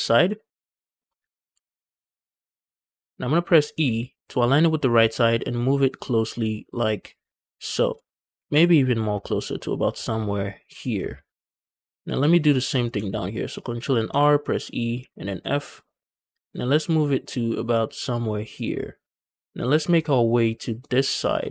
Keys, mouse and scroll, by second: 0.2 shift+middle click, 1.4 ctrl+r, 3.6 e, 7.5 shift+click, 8.3 g, 8.4 g, 10.6 shift+click, 11.6 shift+middle click, 12.1 scroll up 2, 12.8 ctrl+r, 13.3 click, 13.7 click, 13.9 e, 14.8 f, 16.2-17.4 shift+middle drag, 18.2 shift+click, 20.4 middle click, 20.8 scroll down 1, 20.9-21.5 scroll up 4.